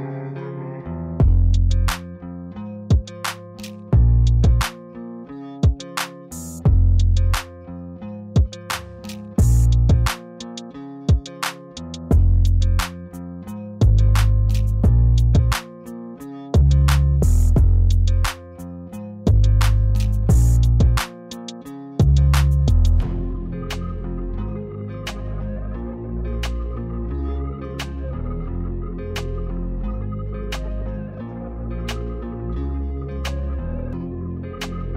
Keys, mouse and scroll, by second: 0.0-1.9 typing, 0.6 click, 0.9 click, 1.4 click, 1.8 click, 2.6 click, 4.8 click, 4.9 Down, 5.1 Return, 5.5 click, 7.9 click, 9.6-10.0 z, 10.3 ctrl+z, 10.8 space, 10.9 click, 11.7 space, 11.8 click, 13.7 ], 13.8 ], 14.1 ], 15.8-18.2 typing, 20.0 ], 20.1 ], 22.9-23.3 typing, 23.0 click, 24.5 ], 24.5 ], 24.6 ], 26.3 click, 28.1 click, 29.3 space, 30.0 click, 32.7 click, 33.7 space, 33.8 click, 33.9 space, 34.2 click.